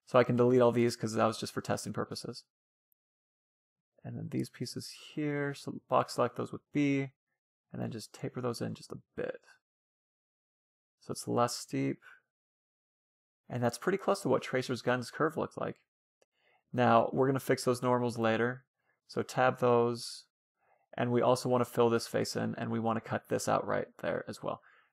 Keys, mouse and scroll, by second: 0.8 Delete, 2.0-3.7 middle drag, 2.4 a, 2.6 a, 2.8 b, 6.8-8.2 drag, 8.7 a, 8.9 Tab, 9.1-10.6 middle drag, 10.6 scroll up 1, 10.7 scroll down 1, 10.9-13.4 middle drag, 14.1-15.7 middle drag, 16.5-18.2 drag, 17.4 Tab, 19.8-21.4 middle drag, 22.8 ctrl+r.